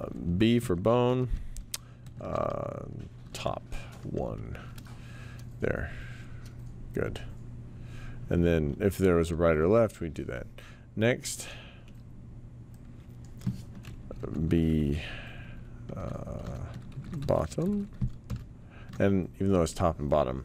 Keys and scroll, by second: 0.9-4.0 typing, 14.2 typing, 16.2-18.3 typing.